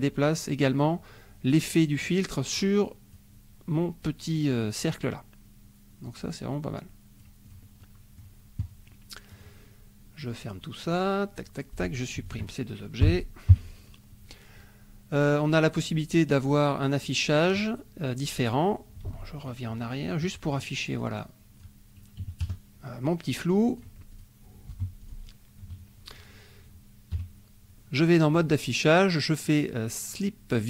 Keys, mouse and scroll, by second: 2.6 click, 6.1-7.4 drag, 7.5 click, 7.8 middle click, 9.3 click, 10.4 click, 10.8 click, 11.7 click, 12.3 shift+click, 13.1 Delete, 13.5 KP_5, 15.1-17.1 drag, 19.1 ctrl+z, 19.5 ctrl+click, 20.5 click, 21.0 click, 21.3 click, 22.2 KP_Subtract, 22.5 KP_Add, 23.3-24.0 drag, 24.1 click, 24.7 Delete, 25.0 click, 27.2 KP_5, 28.3 click.